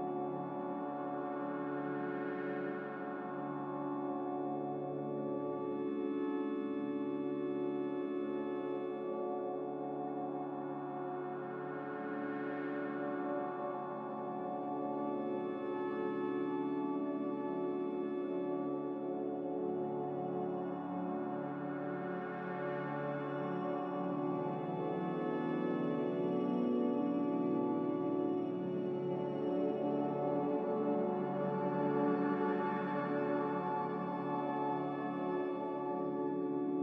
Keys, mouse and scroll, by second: 34.6 m.